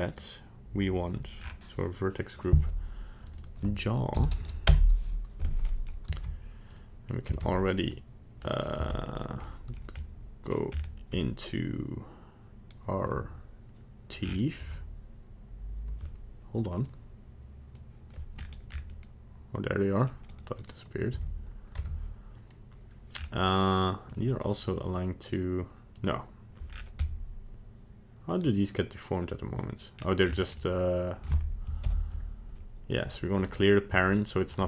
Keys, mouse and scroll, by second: 0.1 click, 1.4-2.1 scroll down 5, 2.3 click, 3.3 click, 3.4 click, 5.7 middle click, 6.1 ctrl+Tab, 7.5 ctrl+Tab, 8.4 middle click, 8.8 z, 9.4 middle click, 10.0 middle click, 10.7-11.0 scroll up 5, 11.2 middle click, 12.7 middle click, 12.9 middle click, 13.7 middle click, 13.9 middle click, 14.1 middle click, 14.2 scroll down 7, 14.6 Tab, 16.7 click, 18.4-19.1 scroll up 8, 18.9 middle click, 19.9 middle click, 20.1 middle click, 20.3 right click, 20.7 right click, 21.1 Tab, 21.9 Tab, 23.1-23.5 scroll down 3, 24.1 click, 25.9 click, 26.7-27.0 scroll down 4, 27.0 middle click, 29.9-30.2 scroll down 2, 30.2-30.6 scroll up 5, 30.6 middle click, 31.2 middle click, 31.8 alt+p.